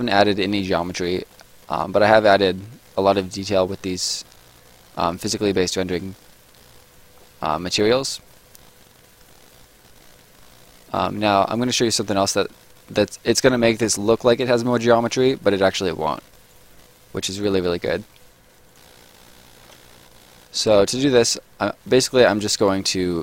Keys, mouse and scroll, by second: 0.4 right click, 1.0-1.5 scroll up 1, 1.5 right click, 2.0 middle click, 2.4 right click, 7.2 scroll down 1, 7.5 middle click, 7.9 right click, 8.2 scroll down 1, 8.4 middle click, 8.7 right click, 11.9 middle click, 12.3 right click, 16.7 middle click, 17.1-17.8 scroll down 1, 17.8 middle click, 18.7 click, 20.2 Escape, 21.7 middle click, 22.1 right click.